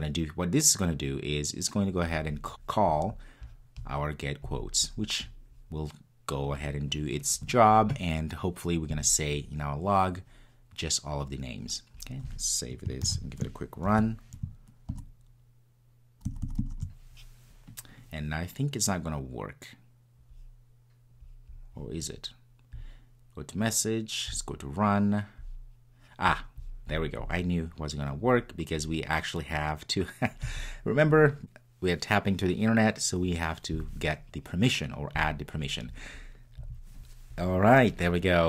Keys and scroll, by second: 13.1 super+s.